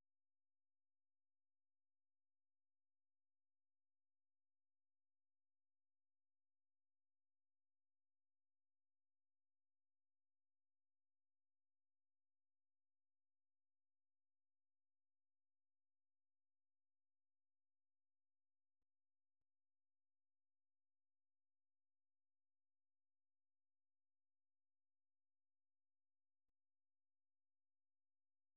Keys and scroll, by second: 0.0-0.9 typing, 17.2 super+1, 19.5-22.1 typing, 24.1-27.0 typing, 28.0-28.5 typing.